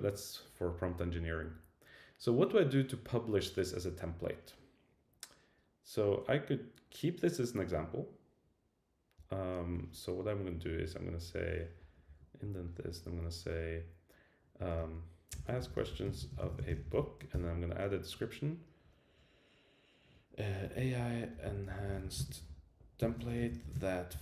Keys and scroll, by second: 9.2 Return, 11.8 Down, 12.1 Tab, 12.4 Up, 17.3 ctrl+i.